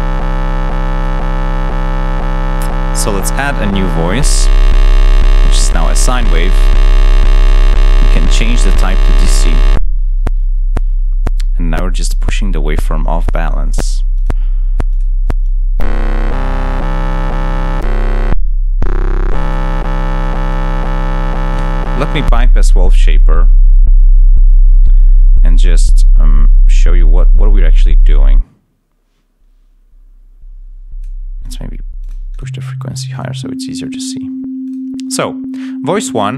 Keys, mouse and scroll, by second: 0.0-1.1 drag, 3.2 click, 3.9 click, 7.0 click, 8.0 click, 15.3-16.5 drag, 20.1 click, 21.3 click, 22.0 click, 27.2 click, 33.0 click, 34.5 click.